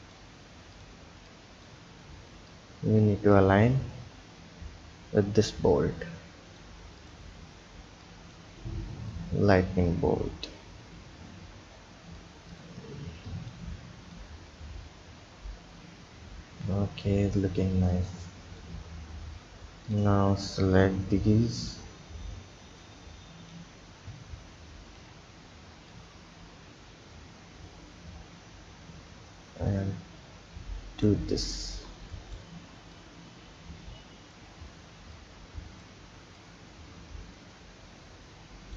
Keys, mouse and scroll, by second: 0.8 click, 1.1 b, 2.5 click, 7.0 click, 7.4-7.8 scroll down 2, 7.8 b, 9.1 click, 12.5 click, 12.9 b, 14.1 click, 18.0-19.3 drag, 19.3-19.8 scroll down 2, 19.8 click, 20.2 b, 22.8 click, 24.3-24.8 scroll down 1, 24.8-25.9 scroll down 2, 25.9 click, 31.3 click, 31.7 b, 33.0 drag, 35.1 drag, 36.4 click.